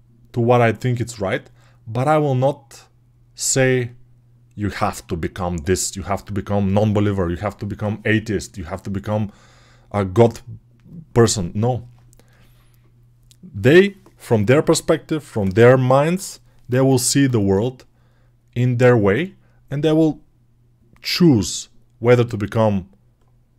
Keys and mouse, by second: 8.7-23.5 drag.